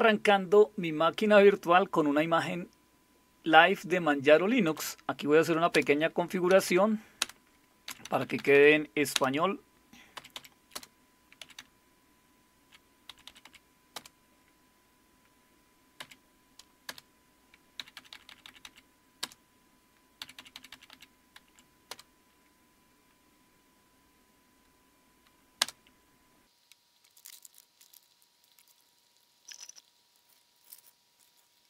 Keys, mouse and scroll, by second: 4.7 Down, 5.7 Return, 6.5 Down, 6.7 Down, 7.2 Return, 7.9 Down, 8.0 Down, 8.2 Down, 8.4 Down, 8.5 Down, 9.1 Return, 10.2 Up, 10.3 Up, 10.7 Return, 11.4 Down, 12.1-12.6 Down, 12.9 Down, 13.1 typing, 13.3 Up, 13.4 Up, 13.9 Return, 16.0 Up, 16.9 Return, 17.8 Down, 18.0 Down, 18.1 Down, 18.3 Down, 18.5 Down, 19.2 Return, 20.0-20.7 typing, 20.9 Down, 21.5 Up, 21.9 Return, 25.6 Return.